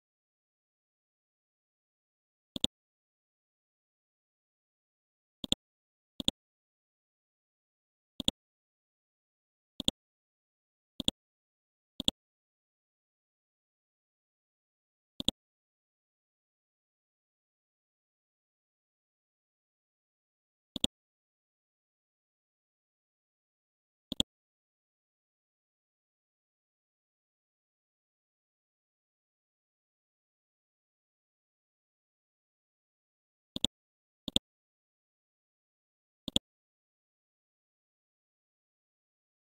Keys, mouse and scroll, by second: 2.6-3.6 drag, 3.8 ctrl+z, 5.4 click, 8.6-9.8 scroll down 1, 11.0 ctrl+click, 12.0 click, 12.5-13.0 scroll down 1, 13.0-13.8 scroll up 1, 15.2 right click, 15.9-16.5 scroll up 1, 17.7 scroll down 1, 19.2-19.9 scroll up 1, 20.7-24.1 drag, 24.1 right click, 24.8-25.3 scroll up 1, 25.3-25.7 scroll down 1, 26.4-27.4 typing, 28.2-28.9 scroll down 1, 29.3 scroll up 1, 29.9-30.6 typing, 30.4 ctrl+d, 33.0-33.6 scroll down 1, 33.6-36.0 drag, 37.2-38.0 scroll up 1, 38.2 ctrl+g.